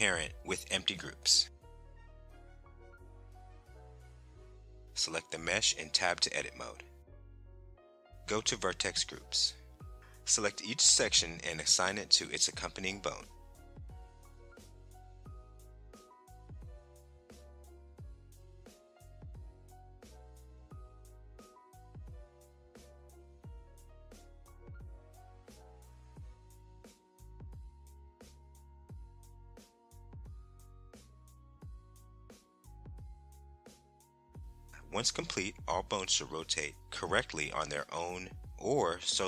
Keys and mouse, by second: 0.8 ctrl+p, 6.8 click, 8.6 Tab, 10.4 click, 12.1 click, 17.4 click, 19.2 click, 20.9 click, 22.1 click, 23.2 click, 23.8 click, 24.1 click, 24.6 click, 25.3 click, 25.5 click, 25.8 click, 26.4 click, 27.1 click, 27.4 click, 28.1 click, 29.0 click, 29.3 click, 30.5 click, 31.2 click, 31.5 click, 32.2 click, 32.8 click, 33.2 click, 34.6 Tab, 36.1 click, 37.3 ctrl+Tab, 38.5 click.